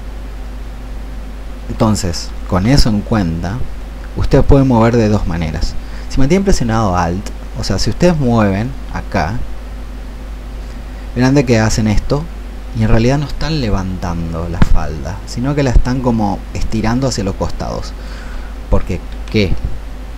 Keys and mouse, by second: 2.5 Escape, 3.8-18.8 drag, 19.0 Escape.